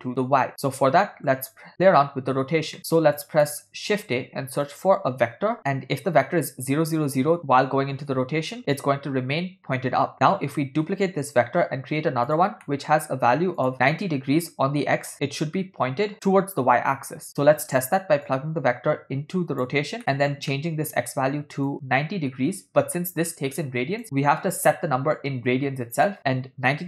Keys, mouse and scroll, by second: 1.1 middle click, 2.8 click, 2.8 middle click, 3.5 middle click, 4.1 shift+a, 11.0 shift+d, 12.7 middle click, 13.7 click, 18.3-19.8 drag, 20.2 middle click, 20.6 ctrl+middle click, 21.7-24.0 drag, 26.0-26.8 drag.